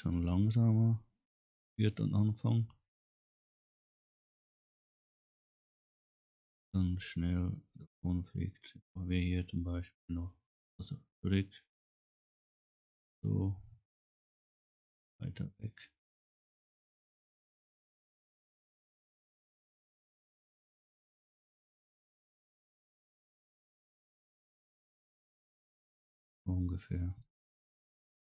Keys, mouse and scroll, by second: 0.0 scroll up 1, 3.8 scroll down 1, 4.2 scroll up 1, 7.8 click, 9.2 click, 11.8 click, 13.3 click, 14.5 click, 15.5 click, 16.5 right click, 18.0 click, 18.6 click, 25.4 click, 27.1 click.